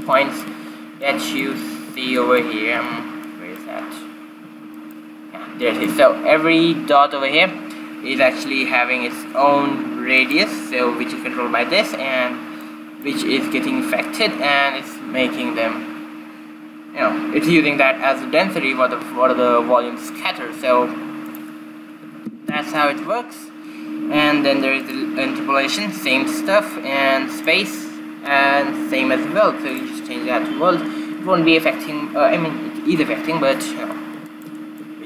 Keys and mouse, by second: 0.7 right click, 3.4 ctrl+b, 5.4-6.8 right drag, 6.8 click, 7.9 click, 10.8-12.7 drag, 13.2-15.0 drag, 21.9-23.8 drag, 25.4-29.9 drag, 34.9-35.0 middle drag.